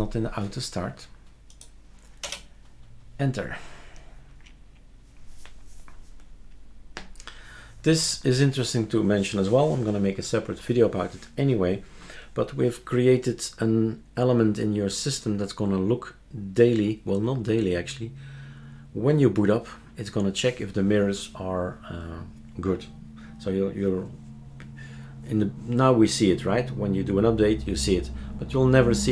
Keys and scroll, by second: 2.3 Return.